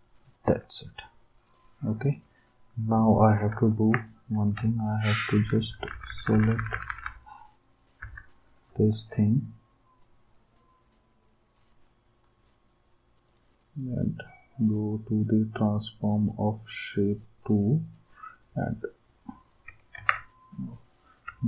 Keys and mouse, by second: 3.5 ctrl+d, 5.3 Down, 5.6 Down, 5.8 Down, 5.9 Down, 6.1 Down, 6.3 Down, 6.4 Down, 6.5 Down, 6.7 Down, 6.9 Down, 7.0 Down, 8.0 Down, 19.9 ctrl+z.